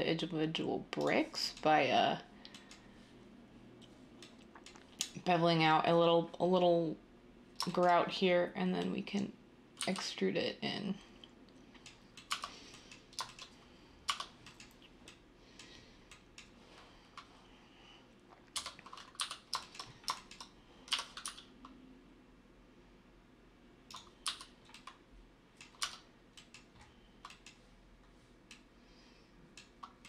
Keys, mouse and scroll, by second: 9.8 e, 12.3 s, 20.0 Tab, 21.3 Tab, 23.1 Tab, 23.6-24.4 typing, 26.2 Tab.